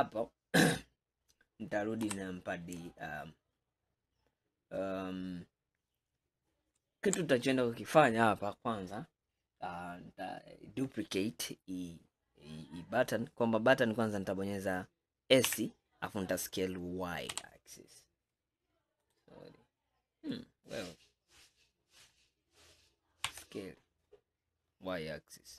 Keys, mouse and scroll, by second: 0.0 scroll down 1, 2.1 KP_1, 9.0-10.9 scroll up 4, 15.5 s, 20.4-23.3 middle drag, 23.3 s.